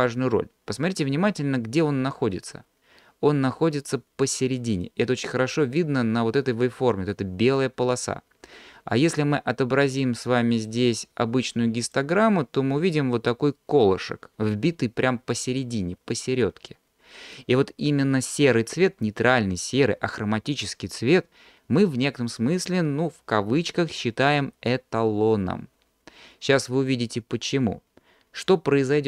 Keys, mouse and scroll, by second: 10.6 click.